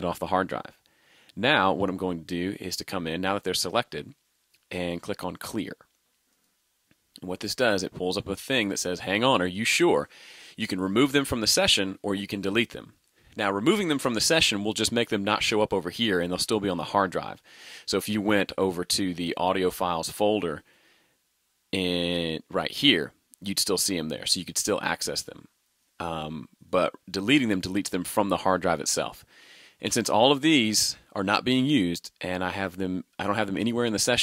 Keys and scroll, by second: 18.6 super+Tab.